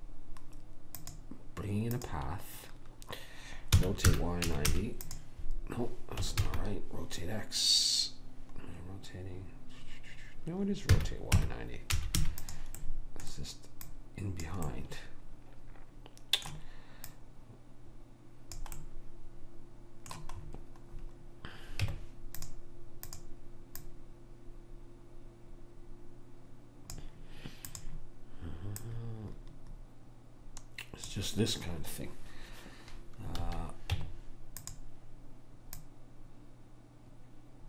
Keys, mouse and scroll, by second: 3.9 r, 6.5 ctrl+z, 11.0 r, 13.9 click, 15.2-17.2 middle drag, 17.2 click, 18.9 middle click, 21.9 Tab, 23.2 click, 27.8-30.7 drag, 33.5 a, 34.0 Tab, 35.9 click.